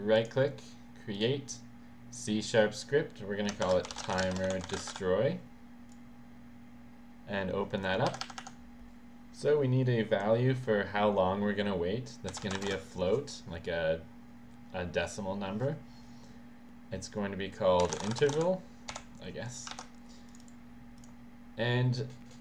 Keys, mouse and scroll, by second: 0.2 right click, 2.1 right click, 2.2 click, 3.7-5.5 typing, 8.1 Right, 8.5 Right, 12.1-13.1 typing, 17.6-19.0 typing, 20.3 click, 20.4 click, 21.0 click.